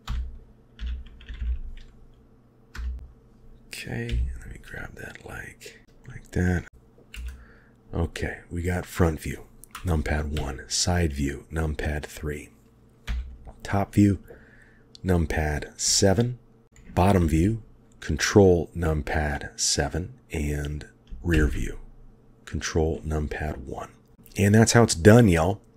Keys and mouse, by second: 0.0 r, 4.1 g, 5.8 shift+middle drag, 7.1 KP_1, 10.3 KP_3, 13.1 KP_7, 15.9-16.6 shift+drag, 17.2 ctrl+KP_7, 21.3 ctrl+KP_1, 24.1 shift+middle click, 24.1 shift+KP_1.